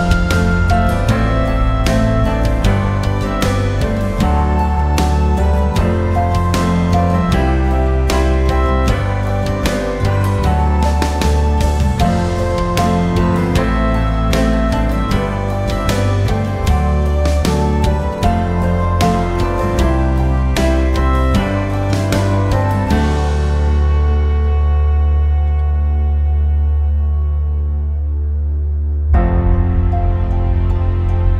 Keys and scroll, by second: 15.9 0, 18.5 3, 18.9 Return, 21.2 5, 21.6 Return, 22.5-26.3 typing, 26.9 Return.